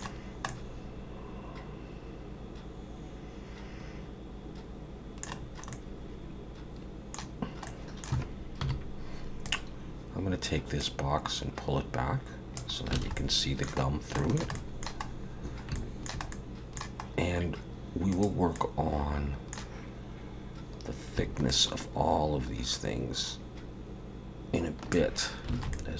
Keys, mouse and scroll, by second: 0.1-0.5 scroll down 3, 0.5 middle click, 5.4 scroll down 4, 5.7 middle click, 7.7 middle click, 8.6 KP_7, 9.4 click, 10.8 click, 13.0 alt+a, 13.2 middle click, 13.8 scroll down 1, 14.2 shift+middle click, 14.5 middle click, 15.1-15.7 scroll up 5, 15.7 shift+middle click, 16.3 middle click, 17.1 scroll up 1, 18.1 click, 18.6 middle click, 21.5 shift+click, 25.5 alt+a, 25.7 middle click.